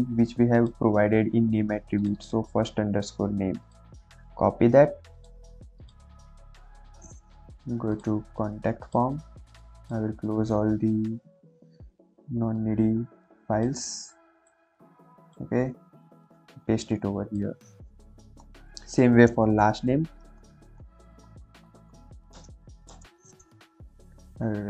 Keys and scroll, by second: 3.0 ctrl+c, 16.6 ctrl+v, 18.3 Return, 19.8-22.8 typing.